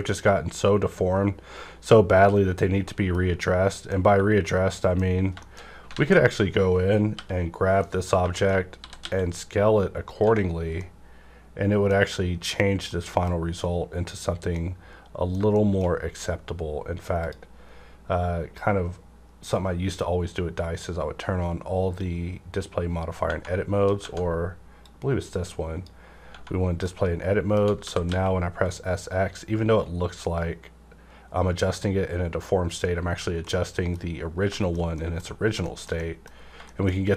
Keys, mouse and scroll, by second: 2.0 click, 2.0-2.5 scroll down 1, 2.6 scroll down 1, 2.9 middle click, 3.7 middle click, 4.1 Tab, 4.7 middle click, 4.7 middle click, 5.1-6.0 scroll up 3, 5.4 shift+middle click, 5.9 alt+a, 7.1 l, 7.4 scroll down 1, 7.8 middle click, 7.8 middle click, 8.3 middle click, 8.8 typing, 10.1 click, 10.2 Tab, 10.5 scroll down 1, 10.8-12.9 middle drag, 12.7 scroll down 1, 12.9 middle click, 13.7 scroll up 1, 14.5 middle click, 15.5-17.2 shift+middle drag, 17.2 click, 18.6-21.7 drag, 23.3 Tab, 23.3 click, 23.3 typing, 24.8-26.9 drag, 26.3 Tab, 26.9 shift+middle click, 27.8 typing, 32.7 click, 33.4 middle click, 34.2 scroll down 1, 34.5 shift+middle click, 35.4 scroll up 1, 35.6 shift+middle click, 36.3 scroll up 1, 36.6 shift+middle click, 37.0 shift+scroll down 1.